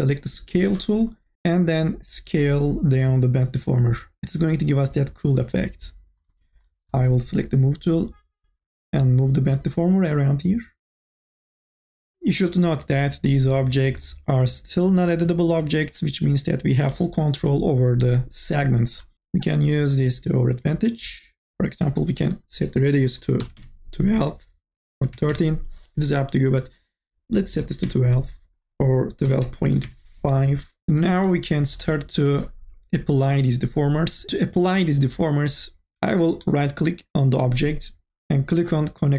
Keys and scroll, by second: 1.3 ctrl+z, 23.2 KP_1, 23.5 Return, 24.8 KP_1, 25.1 KP_3, 25.2 Return, 27.5 KP_1, 27.7 Return, 29.0 KP_1, 29.4 KP_Decimal, 29.5 KP_5, 29.7 Return.